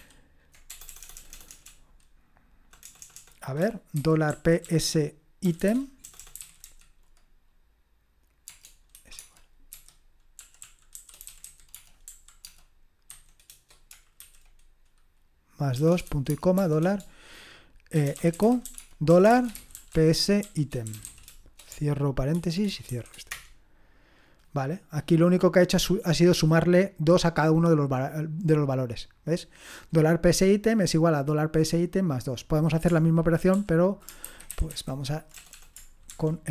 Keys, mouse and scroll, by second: 0.7-7.1 typing, 9.2-13.1 typing, 14.2 typing, 15.7 BackSpace, 16.0 ;, 16.3 shift+space, 16.6 shift+4, 17.9-23.8 typing, 29.0-30.7 drag, 31.1-32.9 drag, 33.5 ctrl+p, 34.2 alt+b, 34.5 alt+b, 34.7 alt+b, 35.3-36.5 typing.